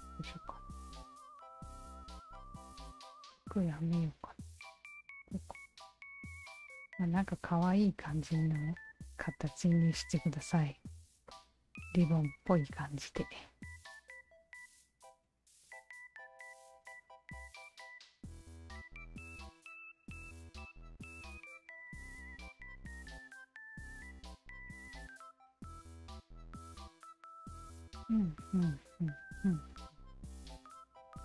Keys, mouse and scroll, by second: 3.4 shift+click, 4.0 shift+click, 4.5 shift+click, 5.3-7.1 alt+drag, 7.9 alt+click, 8.7 alt+click, 9.8 alt+click, 10.5 alt+click, 11.3-13.0 alt+drag, 13.7 alt+click, 14.5 alt+click, 15.7 alt+middle click, 16.3 alt+click, 17.2-18.3 alt+drag, 18.8 alt+click, 19.5 alt+click, 20.3 alt+click, 21.7 alt+click, 22.5 alt+click, 23.0 alt+click, 23.4 alt+click, 23.9 ctrl+z, 24.1 ctrl+z, 24.8 click, 25.6 click, 29.0-30.5 alt+drag, 30.9 alt+right click.